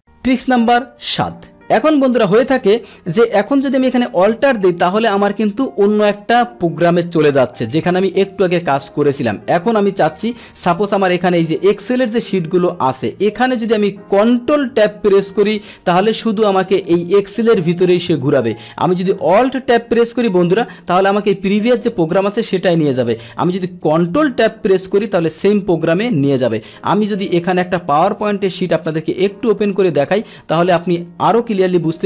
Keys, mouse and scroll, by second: 4.0 click, 4.9 Tab, 8.0 alt+Tab, 8.8 alt+Tab, 8.8 click, 10.8 click, 11.5 click, 12.1 click, 14.7 ctrl+Tab, 15.7 ctrl+Tab, 16.4 ctrl+Tab, 17.0 Tab, 17.6 ctrl+Tab, 17.9 ctrl+Tab, 19.3 alt+Tab, 20.8 click, 22.0 Tab, 22.6 click, 22.6 Tab, 24.2 ctrl+Tab, 25.3 ctrl+Tab, 25.9 click, 27.2 click, 31.3 click.